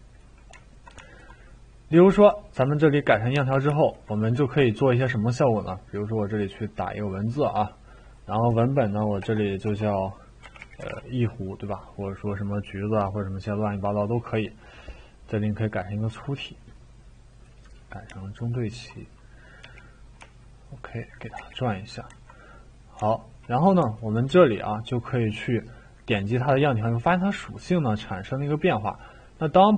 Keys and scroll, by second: 9.2 BackSpace, 19.6 r, 21.4 e.